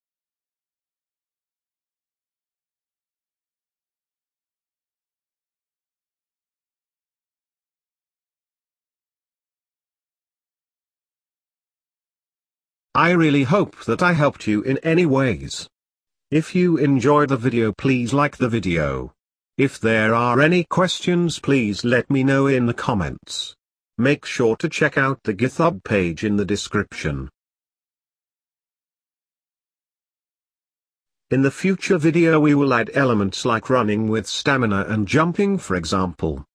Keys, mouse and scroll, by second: 0.2-0.9 scroll down 10, 0.9 middle click, 1.6-5.0 drag, 5.5 shift+click, 6.9 ctrl+j, 8.2-9.2 drag, 11.2-13.6 drag, 13.6 o, 15.3 click, 16.5-19.5 drag, 19.5 scroll down 2, 19.6-22.0 middle drag, 22.0-24.4 drag, 24.4 scroll down 1, 24.5 middle click, 27.1-27.5 scroll down 3, 27.5-28.5 middle drag, 28.5-29.9 scroll down 2, 29.9 scroll down 2, 30.1-31.0 scroll up 4, 30.2 middle click, 31.0-31.3 scroll down 1, 31.3-32.4 middle drag, 32.4-32.9 scroll up 1, 32.9 middle click, 33.6-34.7 drag.